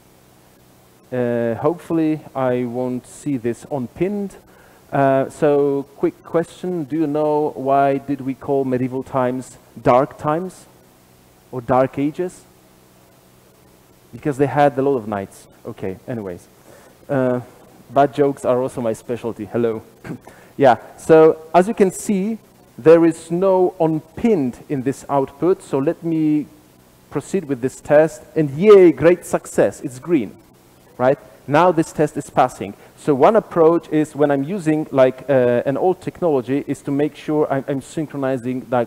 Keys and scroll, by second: 27.2 alt+super+r, 27.2 F9, 35.8 ctrl+Tab.